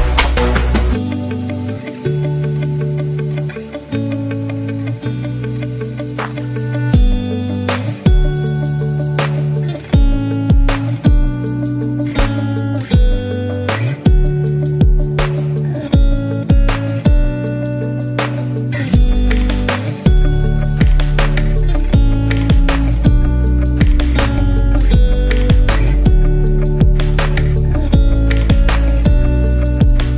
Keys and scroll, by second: 1.4 Left, 3.2 Right, 4.4 super+-, 5.3 v, 10.3 super+-, 11.0-11.5 typing, 15.5 super+-, 17.8-19.0 typing, 27.2 super+0, 28.0 z, 29.0 v.